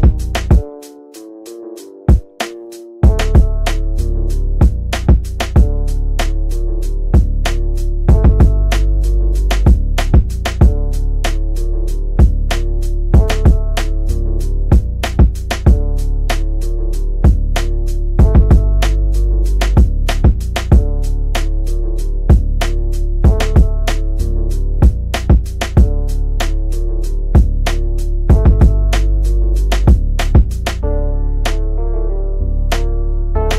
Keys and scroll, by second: 12.5 F3, 14.2 Escape, 33.0 Delete.